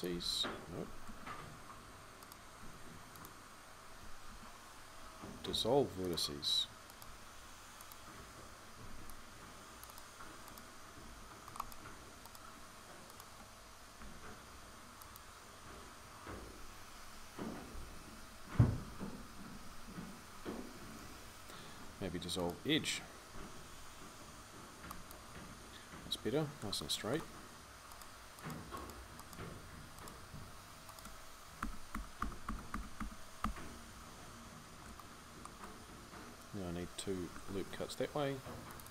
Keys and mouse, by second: 0.9 ctrl+z, 2.0 right click, 2.4 x, 4.1 ctrl+z, 4.8 x, 6.9 x, 8.6 c, 10.9 c, 13.8 x, 16.7-22.1 ctrl+z, 23.1 x, 26.0-31.4 middle drag, 31.4 f, 31.7-33.2 f, 37.1 ctrl+r.